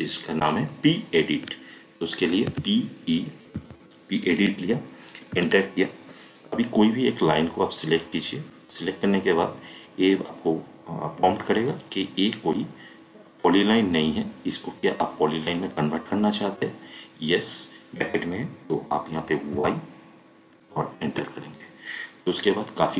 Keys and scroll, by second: 2.5 p, 3.5 e, 5.3 space, 19.5 y, 21.0 Return.